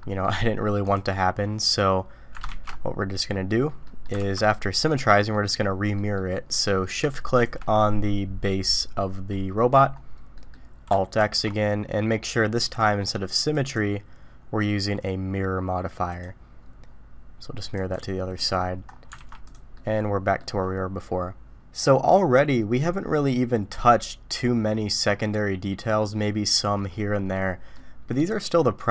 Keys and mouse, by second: 0.2 click, 3.8 ctrl+shift+middle click, 4.2 ctrl+alt+shift+x, 5.0-5.4 middle drag, 5.9 middle click, 7.3 shift+click, 9.3-9.7 middle drag, 10.3 middle click, 11.2 alt+x, 13.5-16.5 drag, 17.8 click, 18.3 middle drag, 19.1 alt+a, 19.4 click, 19.7-20.4 middle drag, 21.8-25.2 middle drag, 27.3-27.7 middle drag.